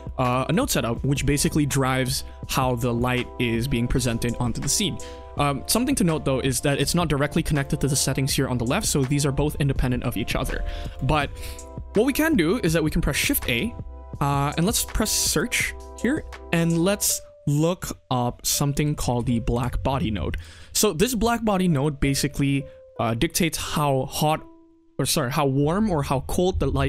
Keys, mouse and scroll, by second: 0.0 click, 0.4 click, 0.8 middle click, 2.9 click, 6.6 click, 7.5 click, 10.8 click, 11.9-12.2 middle drag, 13.3 shift+a, 20.7 middle click, 21.2 click, 22.2 middle click.